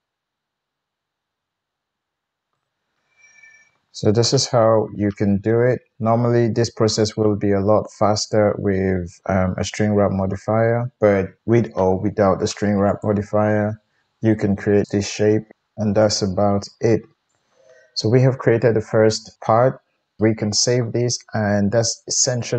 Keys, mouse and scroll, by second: 2.5 Tab, 3.3-12.8 middle drag, 6.5 Tab, 11.4 KP_1, 12.8 click, 13.0-14.8 middle drag, 14.8 click, 14.8 middle click, 15.5-16.3 drag, 15.5 g, 16.3-21.8 middle drag.